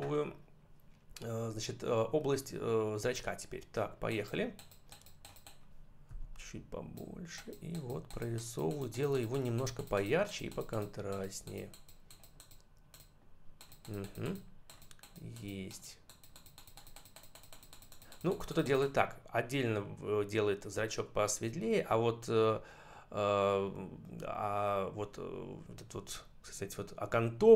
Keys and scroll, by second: 6.0 ].